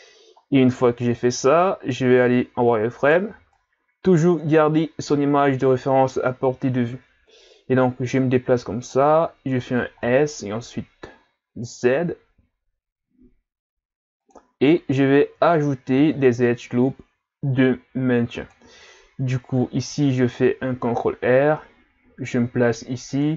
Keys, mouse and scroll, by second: 0.8-1.6 scroll up 1, 1.6 z, 3.0 right click, 3.3 b, 7.3 click, 10.0 s, 15.9 ctrl+r.